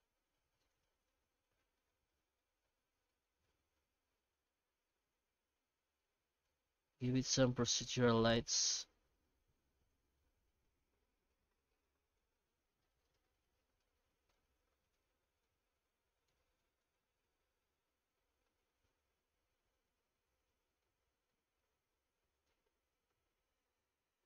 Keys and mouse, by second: 2.2 middle click, 4.6-10.1 drag, 10.3 middle click, 11.4 middle click, 13.2-14.6 middle drag, 15.1 middle click, 16.0 middle click, 16.6 middle click, 20.0-21.0 middle drag, 21.4-23.3 middle drag.